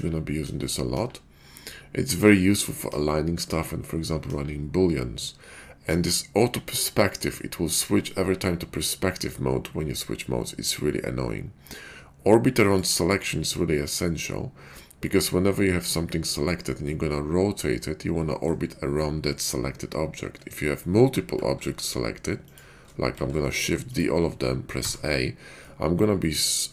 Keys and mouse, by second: 0.0-1.0 typing, 2.0 KP_5, 2.9 KP_5, 3.4 KP_5, 4.2 KP_5, 5.9 KP_5, 7.8 KP_5, 16.8-18.5 middle drag, 21.3 shift+d, 23.1 shift+d, 24.7 a, 25.6-26.7 middle drag.